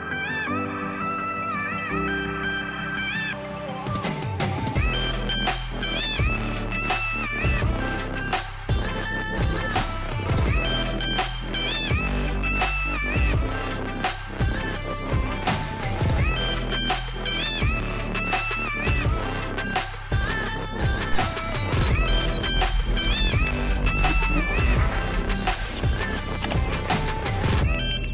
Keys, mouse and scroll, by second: 1.1-4.7 drag, 4.7 ctrl+z, 5.7-11.9 drag, 11.9 ctrl+z, 12.8-16.5 drag, 16.5 ctrl+z, 18.6-25.3 drag, 25.3 ctrl+z, 27.8 click.